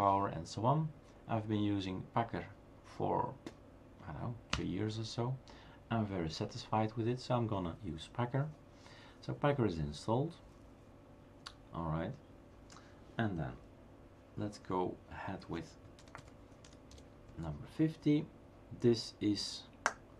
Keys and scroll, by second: 4.5 Return, 16.0-18.3 typing.